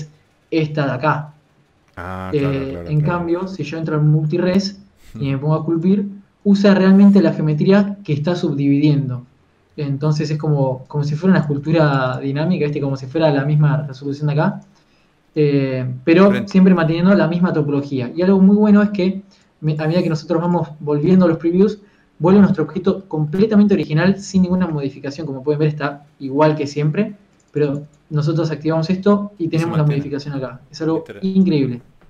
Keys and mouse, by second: 0.3 z, 2.1 click, 2.4 click, 3.8 click, 4.2 click, 4.4 right click, 10.7-12.5 drag, 13.1-15.1 drag, 13.3 a, 17.1 Tab, 18.2 Tab, 20.0 click, 21.6-24.3 middle drag, 25.3 KP_3, 25.5 Tab, 26.1 Tab, 31.8-32.0 right drag.